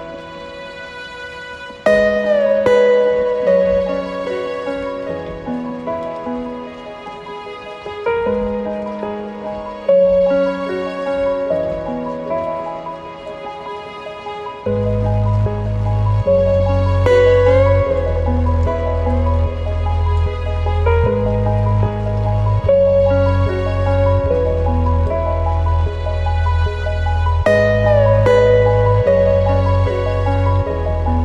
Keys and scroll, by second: 21.0 ctrl+g.